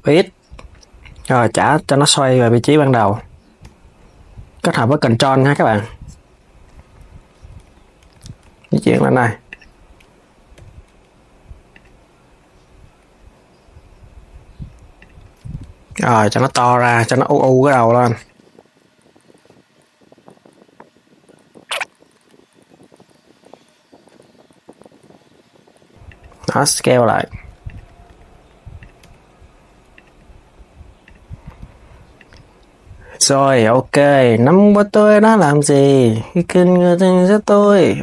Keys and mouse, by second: 5.3 KP_3, 7.4 KP_3, 7.9 g, 10.3 g, 14.7 click, 15.3 alt+s, 16.1 alt+s, 16.3 KP_3, 17.9 click, 18.2-20.6 typing, 19.1 alt+s, 19.7 click, 20.4 Tab, 20.5 click, 21.5 click, 22.0 click, 22.1 shift+click, 22.2 g, 22.6 r, 22.9 click, 23.0 click, 23.1 g, 23.6 click, 23.7 alt+s, 24.0 alt+s, 24.2 click, 24.8 click, 24.9 r, 26.2 alt+s, 27.0 alt+s, 27.4 click, 27.8 r, 30.8 click, 31.2 r, 33.3 click, 33.7 g, 36.3 click, 36.9 alt+s, 37.3 alt+s.